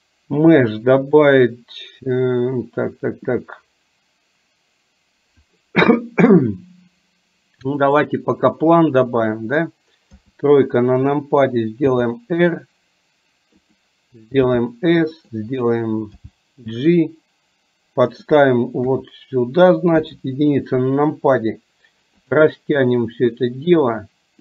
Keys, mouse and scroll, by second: 10.3 KP_3, 11.9 r, 14.6 s, 16.3 g, 18.9 KP_3, 20.0 KP_1, 23.4-24.4 drag.